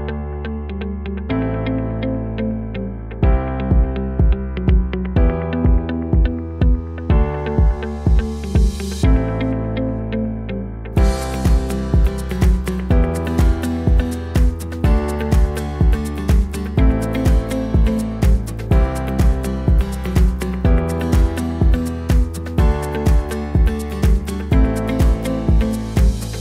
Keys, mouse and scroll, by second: 0.9-4.5 drag, 12.2-16.4 drag, 12.2-19.7 right drag, 17.8 click, 19.6 click, 20.2-26.4 drag, 20.2-26.4 right drag.